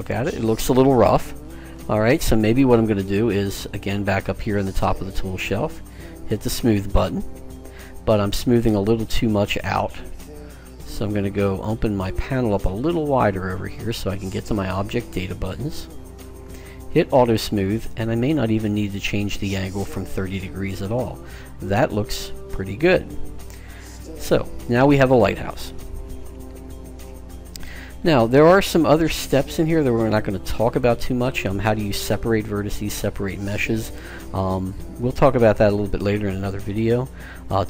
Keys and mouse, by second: 3.8-5.5 drag, 6.4-7.9 drag, 7.9-10.2 middle drag, 10.9-12.6 drag, 15.4-18.9 drag, 21.1-25.2 middle drag.